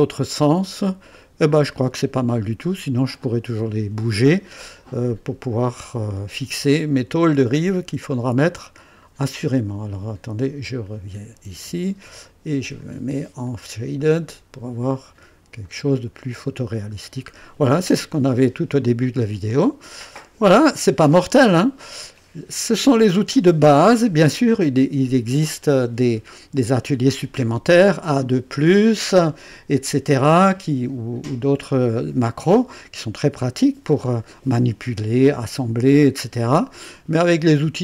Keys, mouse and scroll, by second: 0.3-2.9 right drag, 7.6 scroll down 2, 8.2-9.2 drag, 10.7 click, 11.9 ctrl+d, 12.8 click, 13.4 click, 14.0 click, 15.6 click, 16.4 scroll up 1, 17.0 scroll down 1, 18.8-22.3 drag.